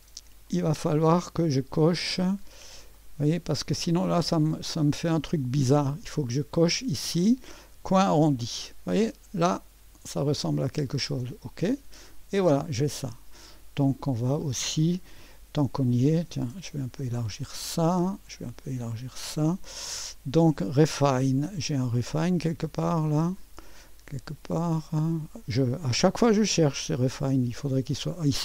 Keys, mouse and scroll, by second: 0.5 right click, 1.5 click, 2.5-3.2 scroll up 1, 3.0 right click, 4.0 click, 6.8 click, 8.0 click, 11.3 click, 13.4 click, 17.0 click, 18.8 click, 26.8-28.4 scroll up 2.